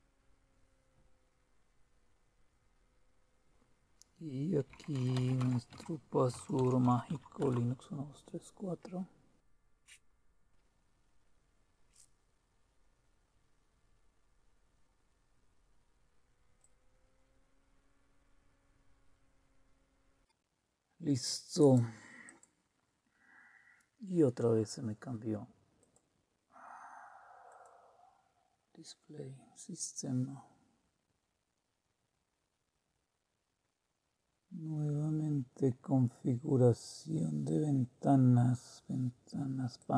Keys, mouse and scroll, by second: 4.4-7.7 typing, 16.6-20.4 drag, 21.6 click, 22.2 click, 25.8 click, 27.5 click, 36.7-39.4 scroll down 1, 39.7 click.